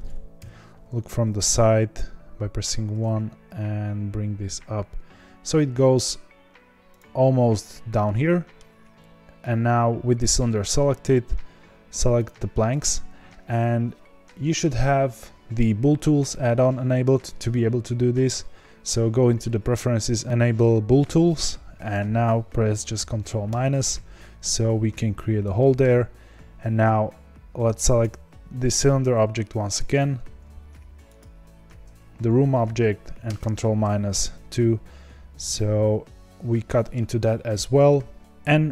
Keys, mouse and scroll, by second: 0.3 KP_1, 3.0 g, 8.0-12.2 middle drag, 12.2 shift+click, 23.4 ctrl+KP_Subtract, 24.7-25.5 scroll up 2, 25.5-28.0 shift+middle drag, 28.0 click, 33.3 ctrl+KP_Subtract, 35.1-35.4 scroll down 2, 35.4-38.7 middle drag.